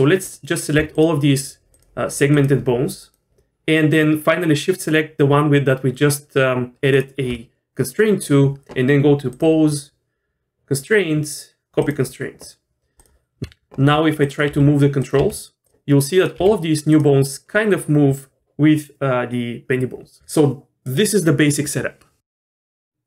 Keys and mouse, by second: 0.2 click, 2.3 shift+click, 3.0 shift+click, 9.5-11.9 drag, 13.4 ctrl+z, 13.4 r, 14.5 g, 15.2 r, 16.4 r, 22.6 middle click.